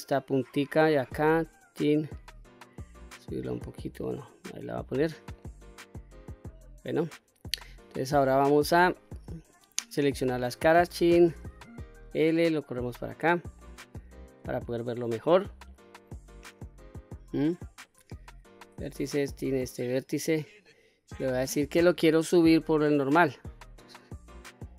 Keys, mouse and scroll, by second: 0.6 1, 1.1 click, 2.3-4.1 drag, 4.5-5.0 scroll up 2, 5.0 middle click, 6.1-6.5 middle drag, 6.5-7.2 scroll down 1, 8.3 q, 8.9-9.6 scroll down 1, 9.8 3, 10.2 click, 11.2 l, 12.2-13.1 drag, 13.4 middle click, 14.7 shift+middle click, 15.3-15.7 scroll up 2, 15.7 middle click, 16.5-16.9 scroll down 1, 16.9 middle click, 17.9 1, 18.9 click, 19.7 middle click, 21.4-22.8 drag, 23.7-24.7 drag.